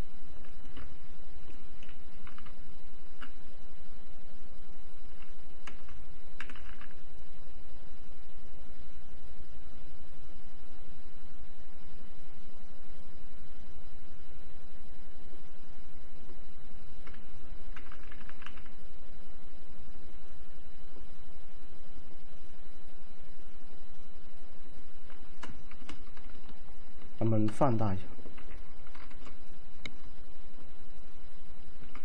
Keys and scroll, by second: 2.5-3.3 typing, 6.2-7.0 typing, 17.8-18.6 typing, 28.5 ctrl+t.